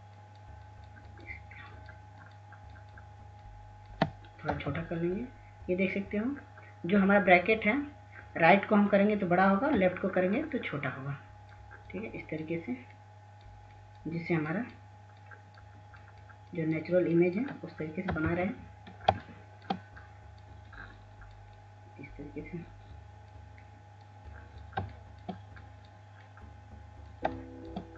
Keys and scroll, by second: 5.5 [, 6.0 [, 9.8-10.7 typing, 19.0 ], 19.2 ], 19.4 ].